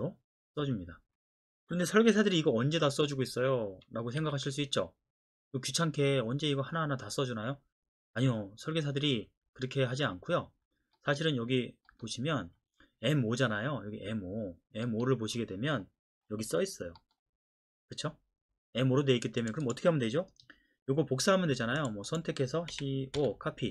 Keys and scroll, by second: 4.2 Escape, 22.7-23.2 typing.